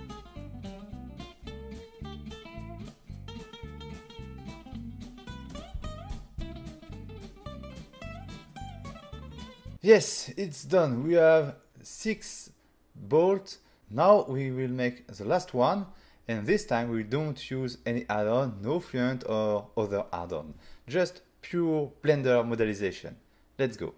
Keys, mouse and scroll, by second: 0.1 click, 0.8 click, 1.0 f, 1.3 right click, 1.6 ctrl+a, 1.9 click, 2.5 n, 3.1 click, 3.7 double click, 3.8-5.0 typing, 5.5 double click, 9.0 click.